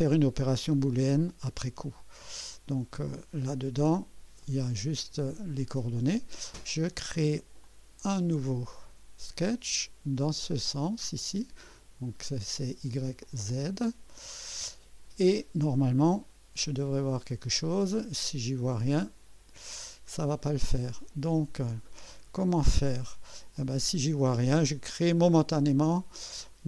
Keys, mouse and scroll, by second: 4.4 click, 4.8-5.1 scroll down 2, 7.6 click, 8.7-9.5 drag, 11.1 click, 13.2 click, 15.2 scroll down 2, 19.0 click, 20.0 scroll down 2, 23.5 click.